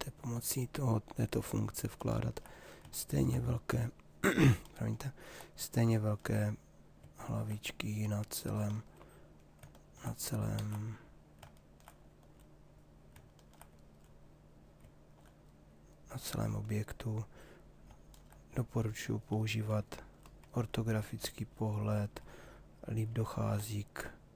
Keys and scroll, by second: 10.2 ctrl+z.